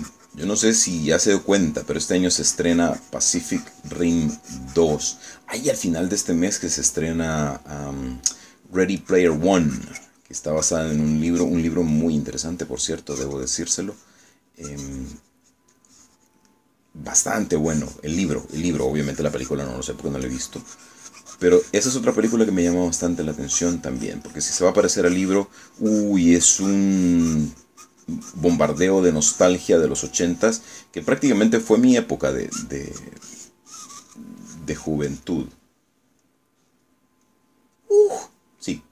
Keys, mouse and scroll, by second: 6.4 middle click, 7.0 click, 10.1-12.3 drag, 13.3 click, 14.1-15.5 drag, 15.7-17.5 drag, 17.6 click, 18.2-21.2 drag, 21.3-33.5 drag, 33.6 click, 35.5 click, 36.5 click, 37.9-38.9 middle drag.